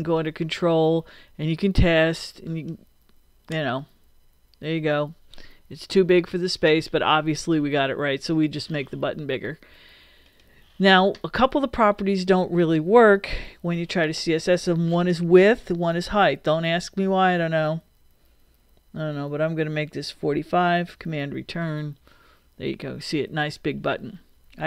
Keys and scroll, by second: 21.0 super+Return.